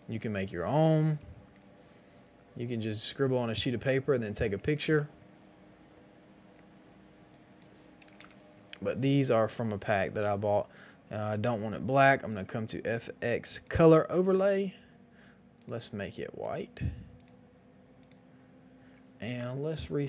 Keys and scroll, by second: 1.1 ctrl+t, 4.6 Return, 8.1 Return.